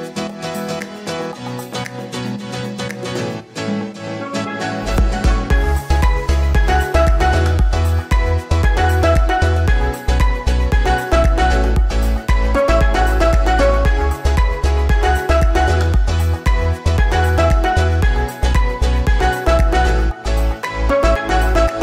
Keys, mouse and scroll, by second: 0.4-1.6 scroll down 1, 1.6-21.8 scroll down 1.